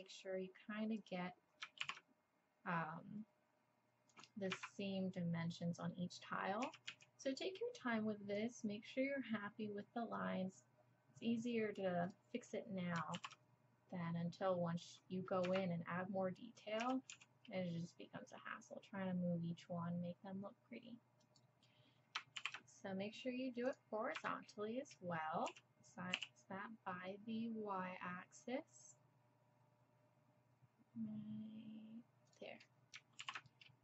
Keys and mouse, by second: 1.8 ctrl+r, 6.6 s, 13.1 ctrl+r, 16.8 s, 22.4 ctrl+r, 25.5 s, 33.2 ctrl+r.